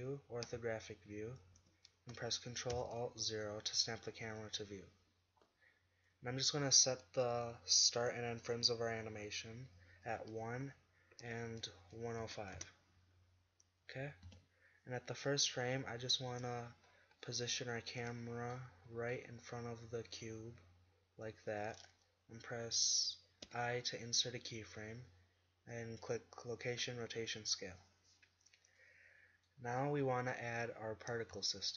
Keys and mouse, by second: 0.5 KP_5, 1.6 z, 2.7 ctrl+alt+KP_0, 10.1-12.0 drag, 14.3 KP_7, 19.8-20.2 drag, 23.5 i, 27.3-28.9 middle drag.